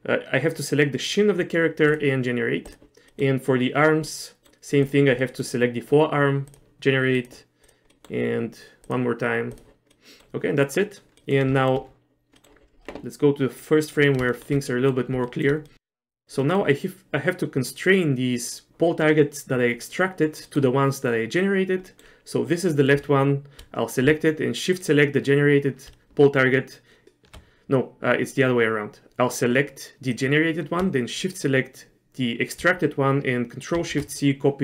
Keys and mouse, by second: 2.0 click, 3.2 middle click, 4.3 middle click, 4.9 click, 5.3 middle click, 6.6 click, 7.7 click, 8.0 middle click, 9.1 click, 10.1 middle click, 10.7 middle click, 11.3 middle click, 11.7 shift+middle click, 12.5 middle click, 13.7 click, 14.4 shift+middle click, 14.8 middle click, 15.3 shift+middle click, 15.8 middle click, 16.1 click, 16.5 middle click, 20.6 middle click, 22.0 click, 33.8 ctrl+shift+c.